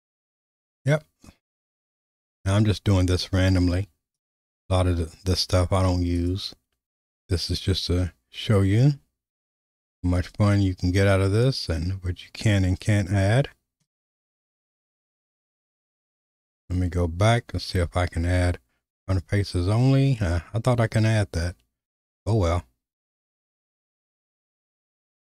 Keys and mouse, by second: 8.5-15.7 drag, 17.4-23.3 drag, 25.0-25.3 drag.